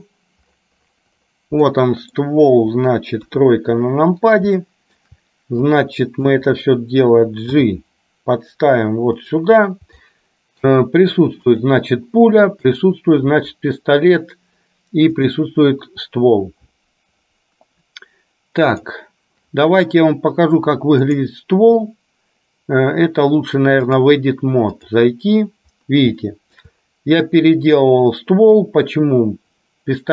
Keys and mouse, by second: 1.8 middle click, 3.3 KP_3, 4.8 shift+middle click, 5.8 click, 7.6 g, 10.1 shift+middle click, 11.6 click, 12.9 click, 15.3 click, 24.0-25.0 drag, 26.4 shift+middle click.